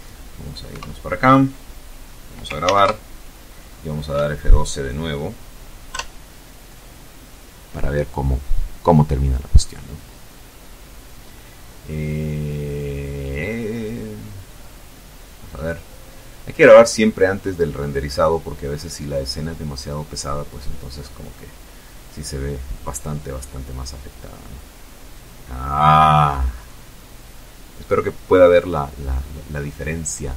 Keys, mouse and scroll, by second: 0.0 ctrl+KP_Enter, 3.1 F12.